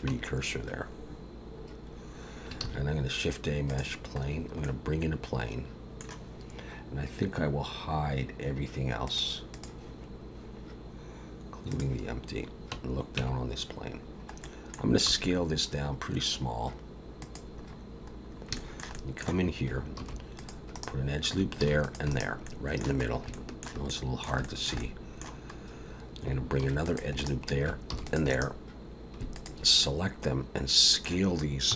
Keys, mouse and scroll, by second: 0.1 Tab, 1.6-2.6 scroll down 1, 2.6 shift+a, 4.2-4.6 scroll down 2, 4.6 middle click, 9.1 click, 9.5 click, 11.7 click, 12.4-13.2 scroll up 1, 13.2 Tab, 14.0-14.4 scroll down 1, 14.4 middle click, 15.1 s, 17.6-18.5 scroll up 5, 18.5 shift+middle click, 18.9 middle click, 20.0 ctrl+r, 21.8 ctrl+r, 22.4 middle click, 23.0 scroll up 2, 23.3 shift+middle click, 23.9 middle click, 24.4 shift+middle click, 24.8 middle click, 25.5 scroll up 1, 26.6 ctrl+r, 27.9 ctrl+r, 29.3 alt+shift+click, 29.8 middle click.